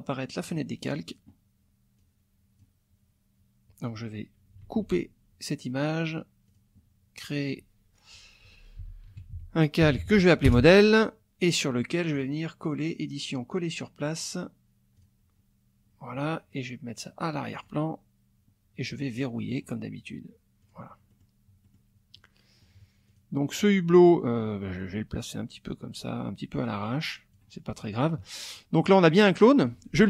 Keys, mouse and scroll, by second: 0.4 click, 2.0 click, 4.6 ctrl+x, 6.5 click, 8.2-10.5 typing, 10.5 Return, 12.1 click, 15.0 click, 17.5 click, 19.5 click, 20.6 click, 21.1 click, 21.6 click, 22.1 click, 23.1 click, 23.6 click, 24.8-27.5 drag.